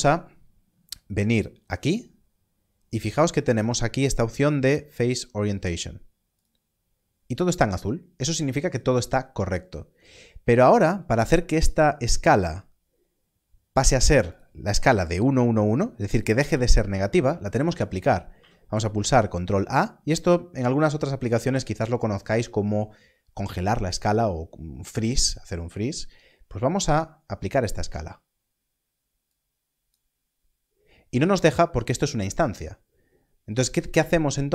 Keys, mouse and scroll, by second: 10.5 click, 14.2 click, 18.3 ctrl+a, 29.2 click.